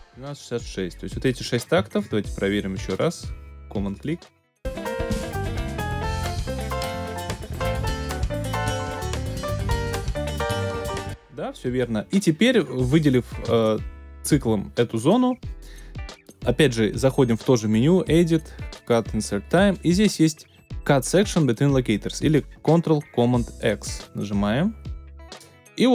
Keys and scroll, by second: 10.7 space, 11.4 alt+super+space.